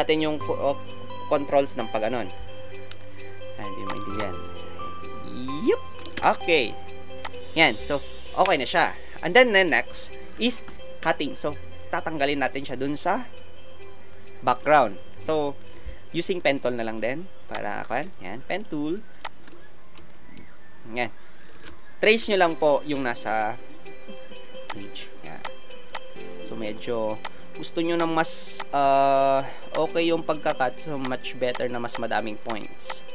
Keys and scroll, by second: 6.1 shift+Return.